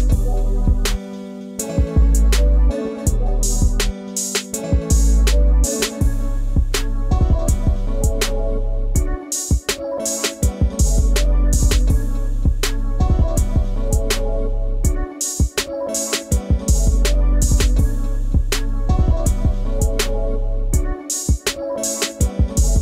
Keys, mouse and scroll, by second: 3.5-4.6 drag, 5.8 click, 12.5-13.9 drag, 15.4 click, 18.1 middle click, 18.8 e, 21.8-22.8 drag.